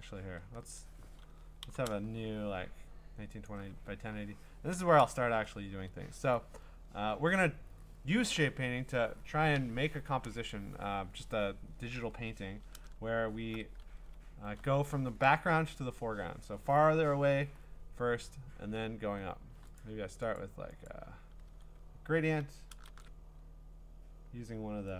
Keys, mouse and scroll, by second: 1.6 ctrl+n, 3.5 click, 5.6 click, 12.6-13.4 scroll, 19.8 click, 20.4 click, 20.9 click, 21.5 g, 22.9 shift+g.